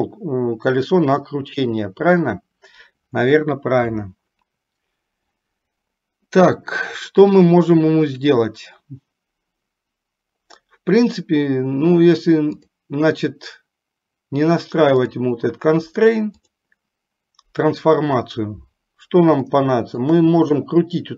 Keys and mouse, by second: 16.6-18.2 drag, 19.7-20.5 shift+middle drag.